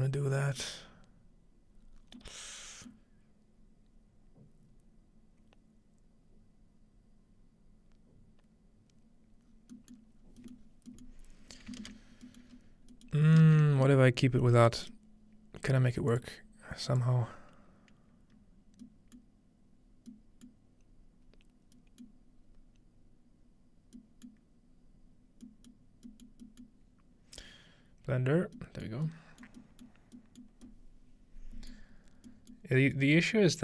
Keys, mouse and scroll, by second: 1.7-3.8 scroll down 2, 9.4-10.2 scroll down 3, 10.2-10.7 scroll up 2, 10.7 middle click, 11.1-12.9 middle drag, 12.1-12.5 scroll down 1, 12.5 scroll up 1, 13.4-14.8 ctrl+middle drag, 14.8 click, 16.1 click, 16.9-18.0 drag, 19.2-20.1 middle drag, 20.5-21.8 middle drag, 21.8-22.4 scroll up 1, 22.1-24.0 middle drag, 22.4-23.3 scroll down 1, 24.2 scroll down 1, 24.3-25.4 middle drag, 24.7-26.3 scroll down 2, 25.7-26.1 middle drag, 26.3 middle click, 26.6-28.0 middle drag, 28.0-29.8 scroll down 2, 28.6-29.6 middle drag, 29.7 middle click, 30.2-31.3 middle drag, 31.3-32.3 scroll up 2, 31.7-32.3 middle drag, 32.3-33.1 scroll up 1, 32.5 middle click.